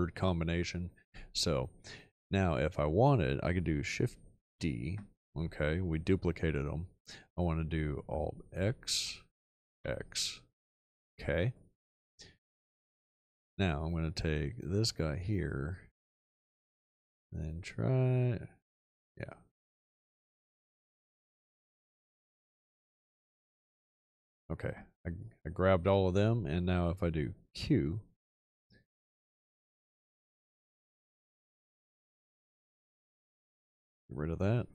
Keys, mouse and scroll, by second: 4.4 shift+d, 8.5 alt+x, 9.7 x, 27.5 q.